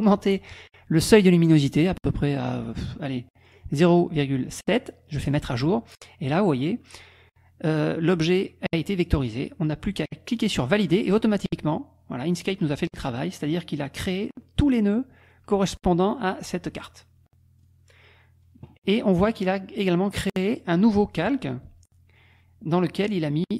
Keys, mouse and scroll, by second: 1.2-2.4 drag, 2.6 click, 3.4 click, 5.3 click, 10.7 click, 12.4 click, 14.1 click, 17.6 click.